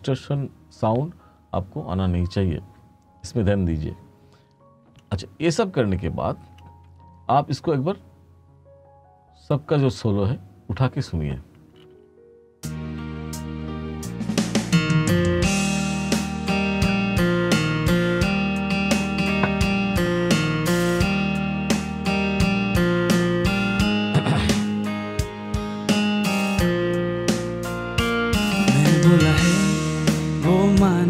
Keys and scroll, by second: 11.9 space, 22.2 ctrl+s.